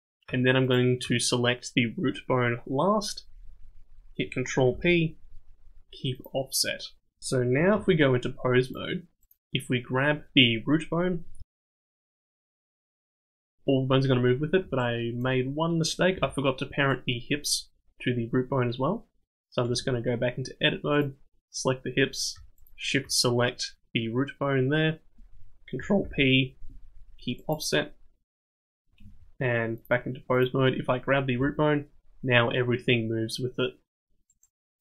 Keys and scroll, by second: 4.7 ctrl+p, 7.7 ctrl+Tab, 11.4 g, 16.1 g, 19.7 Tab, 26.0 ctrl+p, 29.0 ctrl+Tab, 31.4 g.